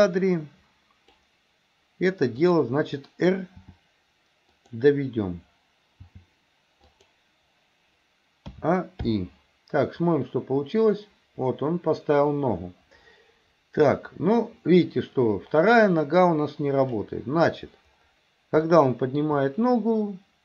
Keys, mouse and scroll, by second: 0.1 click, 2.4 click, 3.6 r, 6.0 g, 8.6 a, 9.1 i, 10.1-17.1 drag, 18.7-19.3 shift+middle drag.